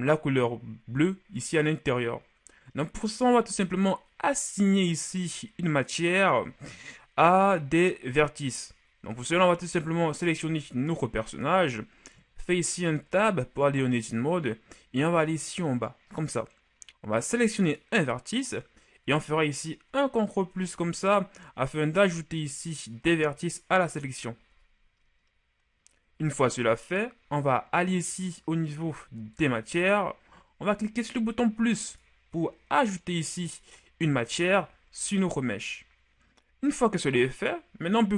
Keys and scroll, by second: 13.0 Tab, 19.9 ctrl+KP_Add, 20.6 ctrl+KP_Add, 21.3 ctrl+KP_Add, 22.1 ctrl+KP_Add, 23.0 ctrl+KP_Add.